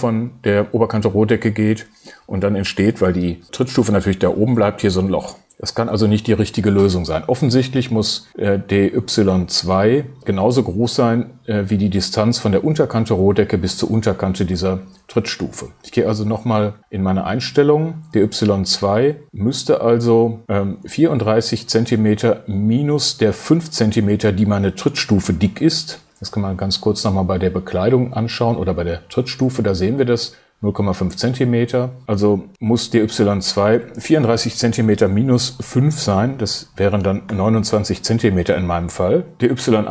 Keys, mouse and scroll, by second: 16.4 super+t, 37.3 BackSpace, 39.2 click.